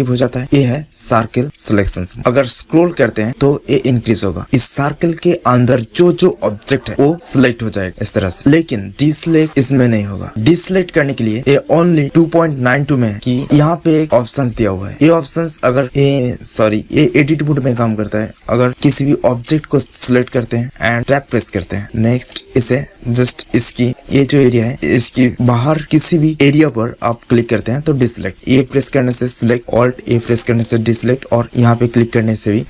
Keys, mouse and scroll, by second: 18.7 click, 18.7 right click, 19.5 middle click, 20.1-21.2 right drag, 21.1 Tab, 21.2 middle click, 22.2-23.3 drag, 27.4-29.2 drag, 28.7 a, 30.0 alt+a, 31.4-32.6 drag.